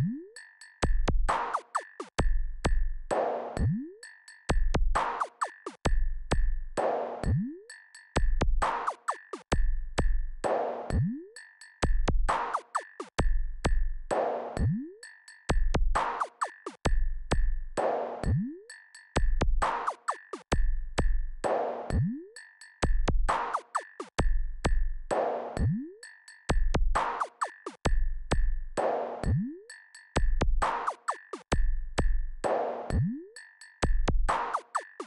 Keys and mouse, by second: 4.5-6.9 drag, 8.4 click, 9.7-12.9 drag, 14.5 KP_2, 20.8 click, 21.4-22.9 drag, 26.7 click, 28.5 click, 29.5 KP_6, 29.6 KP_6, 32.8 shift+click.